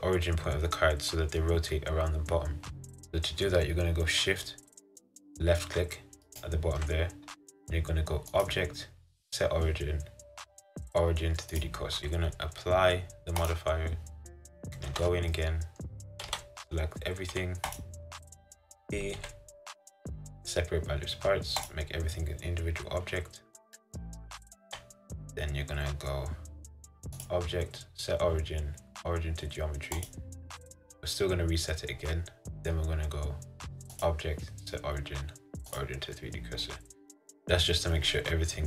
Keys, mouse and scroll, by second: 6.4-11.7 shift+right drag, 12.0 scroll up 1, 13.6-15.0 drag, 15.0 Tab, 15.4-17.9 middle drag, 17.9 a, 21.8 p, 24.7 Tab, 30.2 click, 30.9-35.9 middle drag, 35.9 click, 36.7-38.6 middle drag.